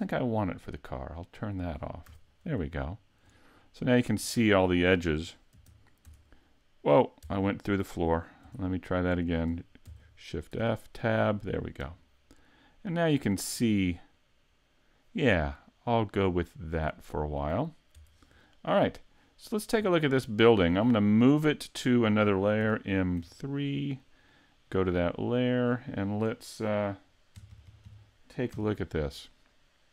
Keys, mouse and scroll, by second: 0.8 click, 1.3 click, 2.1 a, 2.6 shift+middle click, 3.8-4.3 scroll up 1, 4.3 middle click, 5.5 shift+f, 8.0-8.6 scroll down 2, 8.6 middle click, 9.8 shift+f, 18.3-18.7 scroll down 4, 18.7 middle click, 19.4 right click, 19.9 shift+middle click, 20.9 middle click, 22.6 m, 25.5 click.